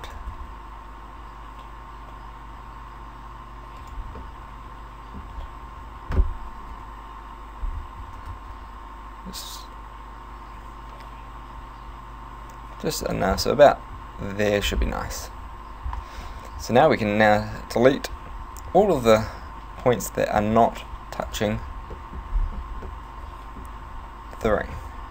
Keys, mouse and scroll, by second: 4.0 right click, 4.3 middle click, 6.8 KP_7, 8.0 s, 13.2 click, 14.8-15.2 scroll down 4, 15.4 a, 16.2 c, 21.4 right click, 22.0 middle click, 22.4-22.9 scroll up 4, 22.9 middle click, 24.4 alt+shift+right click.